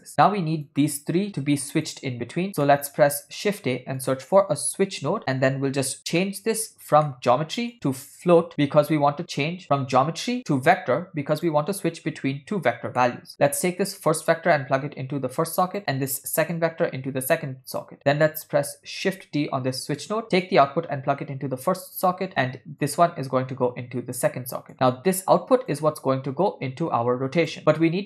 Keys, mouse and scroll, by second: 0.1 middle click, 0.7-1.3 drag, 1.9 click, 2.7 middle click, 3.5 shift+a, 6.2 ctrl+middle click, 7.1 middle click, 7.7-11.6 drag, 13.0 ctrl+middle click, 14.3-15.8 drag, 16.6-18.1 drag, 19.2 shift+d, 20.5 click, 22.9-24.7 drag, 24.7 middle click, 25.8-27.6 drag, 27.6 middle click.